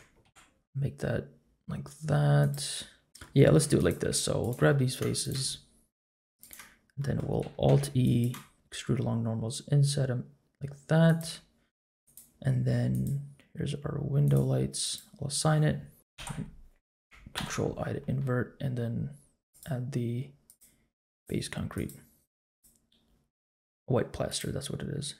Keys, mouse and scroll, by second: 0.2 ctrl+b, 3.1 middle click, 3.6 3, 3.8 click, 4.4 shift+click, 4.7 middle click, 5.2 shift+click, 5.4 middle click, 6.4 shift+click, 7.0 middle click, 7.6 alt+e, 12.0 click, 12.9-14.3 drag, 14.8 click, 16.1 alt+i, 17.3 ctrl+i, 19.5 click, 20.4 click, 21.7 click, 22.3 Tab, 22.5 click, 24.3 click.